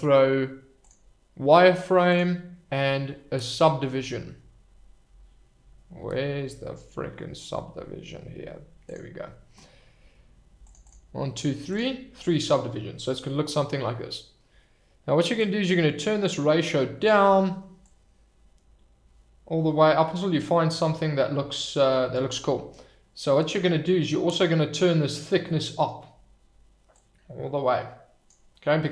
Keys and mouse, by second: 2.1-9.1 drag, 10.7 click, 11.7 click, 12.4-12.9 middle drag, 15.3-17.1 drag, 18.0-20.8 drag, 21.2-21.9 middle drag, 23.5-25.2 drag, 25.4-25.8 middle drag, 26.9-28.3 drag, 28.5-28.9 middle drag.